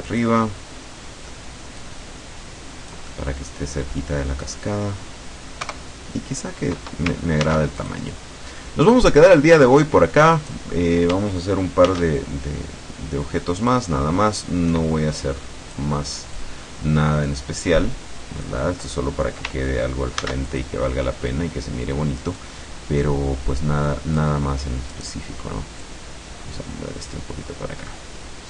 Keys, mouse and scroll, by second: 1.1 click, 1.6 middle click, 1.8-3.6 drag, 3.2 right click, 5.7 KP_0, 7.5 ctrl+s, 7.8 ctrl+click, 10.4 right click, 11.9 shift+d, 13.6 click, 14.4-16.0 drag, 16.4-18.7 drag, 20.2 ctrl+s, 20.5 ctrl+click, 22.5-24.5 drag, 25.0 middle click, 25.9-27.4 drag.